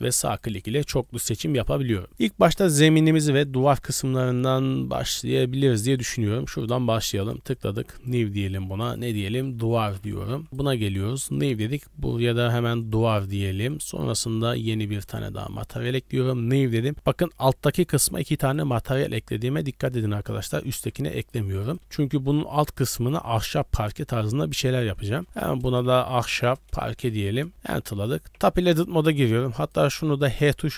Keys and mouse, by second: 3.8-4.4 middle drag, 5.6-6.0 middle drag, 6.0 click, 7.2 click, 7.9 click, 8.8-12.9 drag, 10.5 BackSpace, 15.0 click, 16.9 g, 20.7 g, 22.5-24.5 middle drag, 24.5-27.5 drag, 30.6 middle drag.